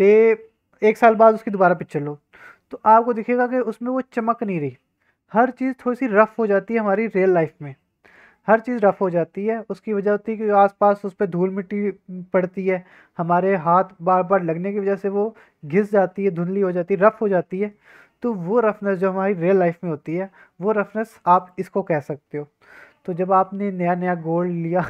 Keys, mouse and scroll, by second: 21.3 click.